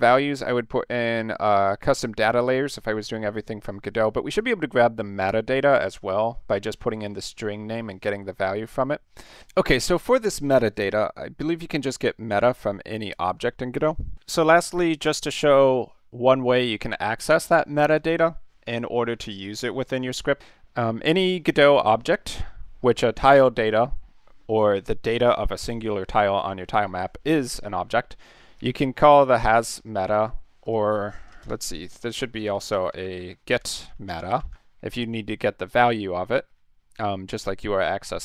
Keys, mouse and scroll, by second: 28.6 click, 30.7 click, 31.2-34.9 typing.